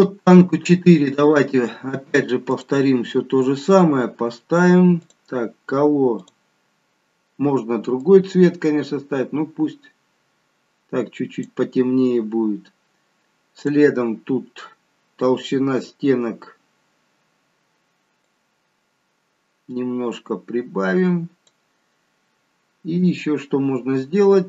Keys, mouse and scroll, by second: 1.1 scroll down 1, 1.2 click, 2.4 click, 4.3-4.9 scroll down 1, 4.9 click, 6.1 click, 13.5 click, 18.1 click.